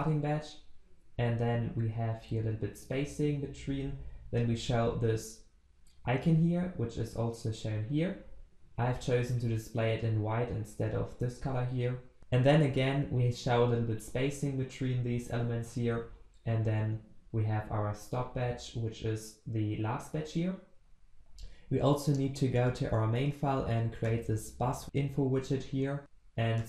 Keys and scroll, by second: 20.7 ctrl+s.